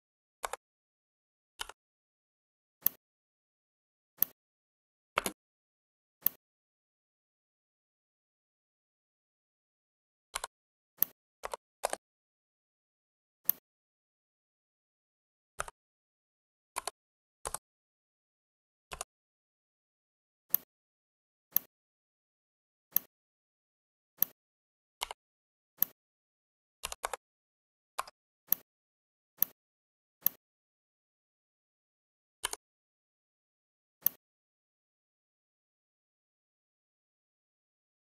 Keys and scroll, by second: 0.3 Return, 5.1 space, 15.5 /, 16.6 3, 17.3 Return, 26.7 2, 26.9 Return, 27.8 Escape.